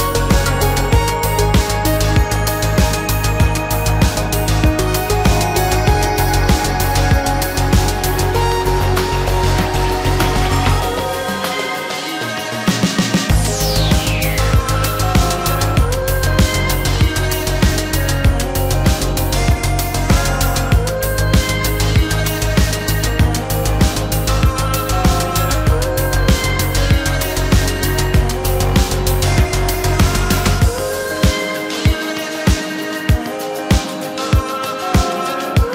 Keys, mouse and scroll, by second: 2.2 shift+middle click, 3.1 space, 3.1 Escape, 5.1 shift+middle click, 8.8 shift+middle click, 13.7 shift+s, 14.2 Escape, 16.1 shift+v, 20.1 ctrl+a, 25.5 shift+v, 27.3 space, 27.4 Escape, 27.6 Escape, 29.9 shift+c, 30.4 shift+middle click, 31.5 shift+middle click, 32.6 shift+middle click.